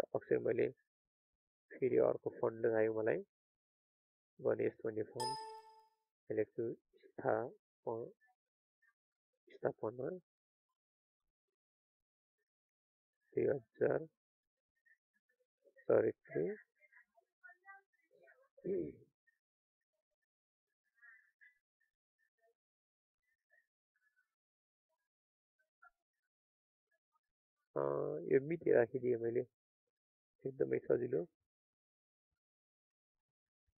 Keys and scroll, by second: 18.8 ctrl+a, 23.1 ctrl+a.